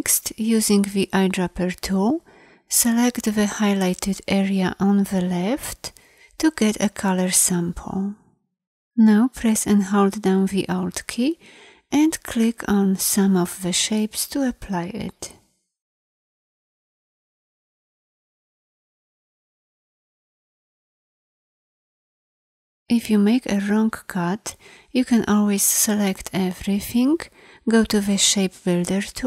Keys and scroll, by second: 0.9 i.